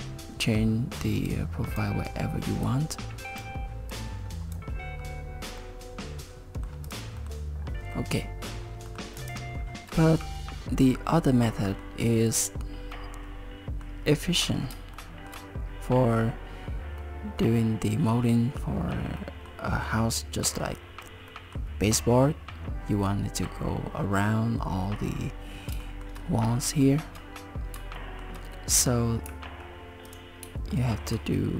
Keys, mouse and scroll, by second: 1.3 click, 2.7 click, 3.9 click, 5.0-5.6 scroll down 2, 5.6 middle click, 6.9 click, 7.2 middle click, 7.9 middle click, 8.5 scroll down 2, 8.9 middle click, 9.2 click, 9.6 shift+middle click, 9.6 scroll up 3, 10.0 middle click, 12.3-12.9 scroll down 3, 12.9 middle click, 14.3 scroll up 3, 15.0 shift+middle click, 17.0 middle click, 18.8 scroll down 2, 19.2 middle click, 20.4 middle click, 21.3 middle click, 25.8 shift+middle click, 26.8 shift+middle click, 28.0 shift+middle click, 29.3 a, 30.1 click, 30.7 shift+middle click.